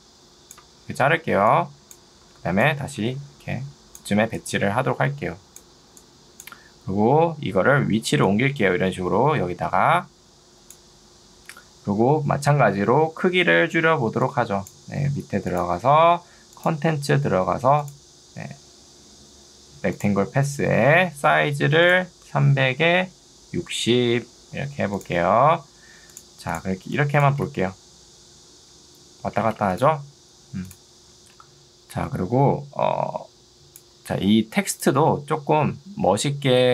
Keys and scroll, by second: 1.5 2, 2.3 Escape, 13.9 ctrl+2, 15.1 Escape, 22.7 0, 23.1 Tab, 23.9 0, 27.3 space.